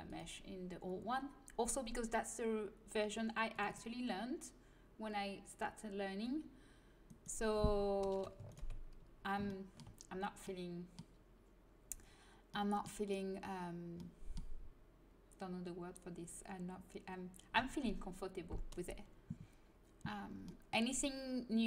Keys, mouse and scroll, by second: 7.0-10.4 right drag, 9.5 click, 10.4-18.1 middle drag, 20.4-21.6 middle drag.